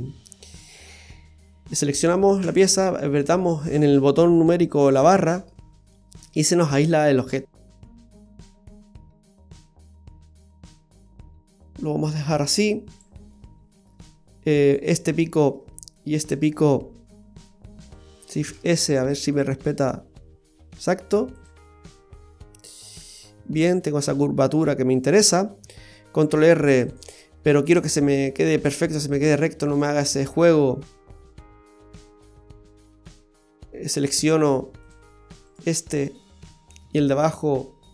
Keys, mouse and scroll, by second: 1.6 a, 2.4 KP_Divide, 5.8-6.8 scroll down 2, 6.2 middle click, 7.7 click, 8.0 right click, 8.4 middle click, 9.1 click, 10.1 click, 10.2 click, 10.6 click, 12.9 click, 13.3 middle click, 14.7 right click, 15.0 middle click, 16.2 shift+right click, 16.7 middle click, 18.5 shift+s, 19.3 s, 21.7 middle click, 26.2 ctrl+r, 30.1-30.7 scroll up 3, 30.8 middle click, 32.6 middle click, 34.8 click, 34.9 click, 35.5 right click, 35.9 middle click, 36.5 middle click, 37.3 shift+right click, 37.7 middle click.